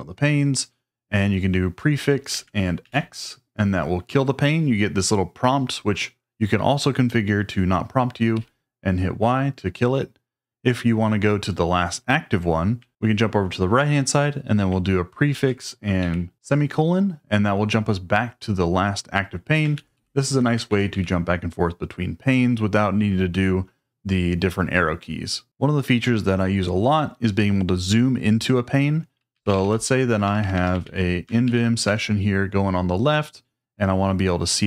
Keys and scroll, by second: 2.3 ctrl+a, 2.8 x, 8.3 y, 15.3 ctrl+a, 16.0 ;, 19.8 ctrl+a, 19.9 ctrl+a, 20.7 ctrl+a, 29.1-32.3 typing.